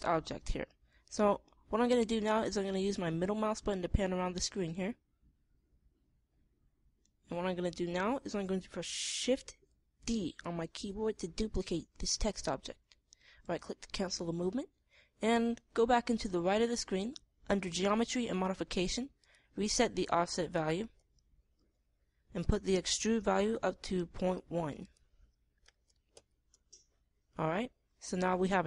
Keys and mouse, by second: 5.1 middle click, 7.9-9.6 middle drag, 10.5 shift+d, 19.7-21.4 middle drag, 21.6-25.3 middle drag, 27.1-28.6 middle drag.